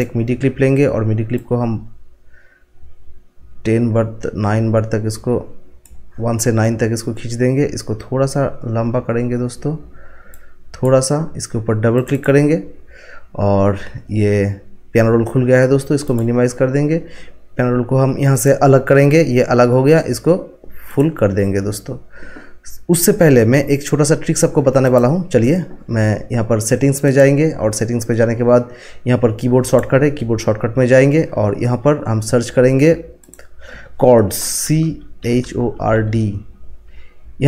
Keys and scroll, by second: 34.6-36.5 typing.